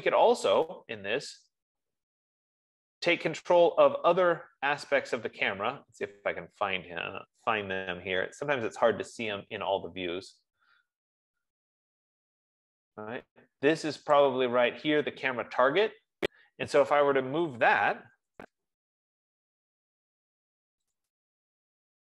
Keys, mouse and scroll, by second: 1.1 middle click, 1.1-1.6 scroll, 1.6 scroll up 1, 1.7-2.4 scroll, 2.4 scroll, 2.6-3.7 scroll down 6, 3.8 scroll up 3, 5.0-5.4 scroll down 1, 5.4 scroll, 5.6 scroll down 1, 6.7-7.5 scroll, 10.3-10.7 scroll, 11.5 scroll, 12.7-13.7 scroll, 14.8 click, 18.3-19.3 typing, 19.8 F15, 21.4-22.1 drag.